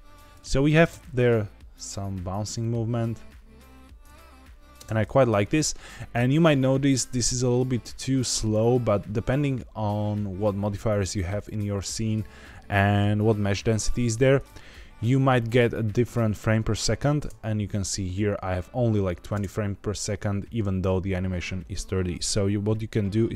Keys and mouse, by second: 0.7 space, 4.8 space, 6.4-8.5 drag, 14.9-15.9 drag, 17.1 space.